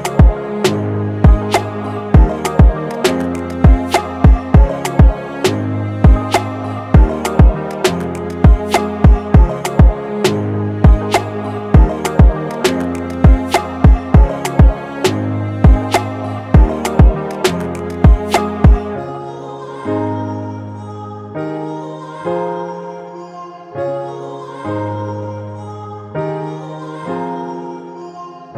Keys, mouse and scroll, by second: 13.0 typing.